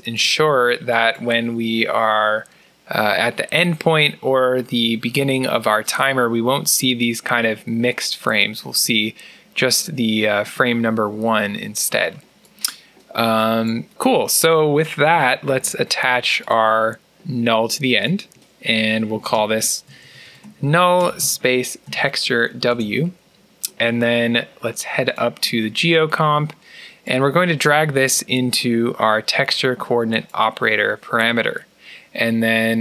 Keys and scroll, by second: 15.4 alt+n, 19.0-21.8 typing, 22.8 Return.